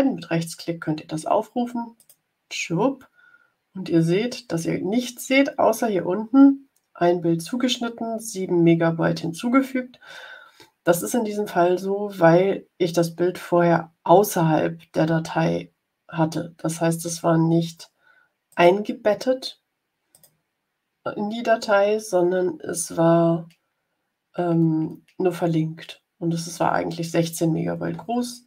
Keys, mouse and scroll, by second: 1.9 click, 18.4 click, 20.0 click.